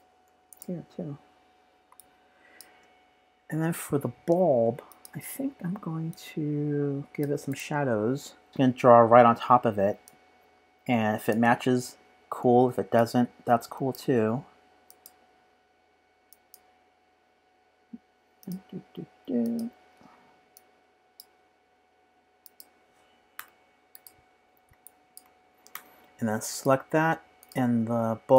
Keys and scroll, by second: 1.9 space, 1.9 p, 2.4 space.